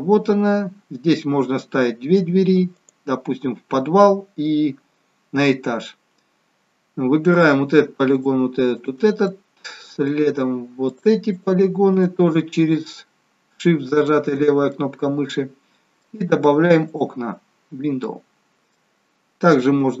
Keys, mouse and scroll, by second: 2.7 click, 7.3 click, 8.1 shift+click, 8.7 click, 9.2 middle click, 10.9 shift+click, 11.3 shift+click, 11.8 shift+click, 13.9 shift+click, 14.7 middle click, 16.9 click, 18.0 middle click.